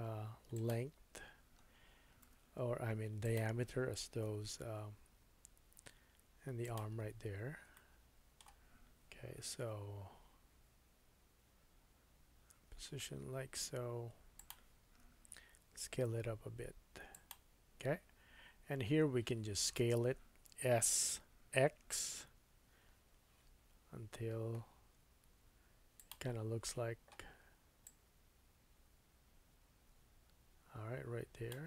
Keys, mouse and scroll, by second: 0.7-3.2 middle drag, 0.9-2.2 scroll up 4, 2.2 g, 4.2 s, 6.9-7.6 scroll up 4, 7.7 shift+middle click, 9.4 g, 9.6-27.8 middle drag, 15.0 s, 20.8 s, 27.8-31.6 drag.